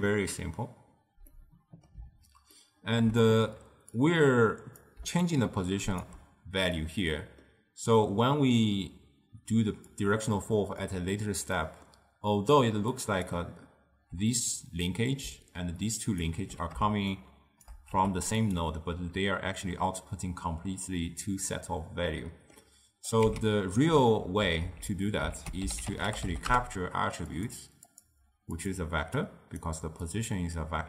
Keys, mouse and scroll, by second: 1.4-4.1 middle drag, 4.1 click, 5.1 d, 5.4 click, 6.1 d, 6.2 d, 6.9-9.6 middle drag, 9.6 d, 10.0 click, 10.9 d, 11.0 d, 11.6-12.5 middle drag, 12.5-14.2 d, 13.0 click, 13.4 d, 15.4-16.6 d, 15.9 click, 16.3 d, 17.2 shift+right click, 18.0 g, 22.2-23.2 middle drag, 23.2 click, 23.4 x, 24.9 ctrl+z, 25.4 ctrl+a, 28.0-29.4 drag, 30.1-30.8 drag.